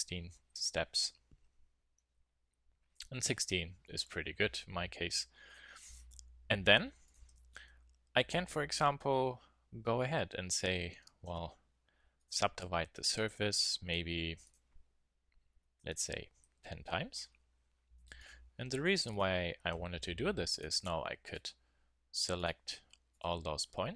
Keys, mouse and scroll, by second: 2.9 KP_1, 4.1 z, 6.4 click, 8.8 middle click, 11.2 w, 14.4 click, 16.2 middle click, 18.2-23.1 drag, 19.9 a, 23.0 a, 23.3 click.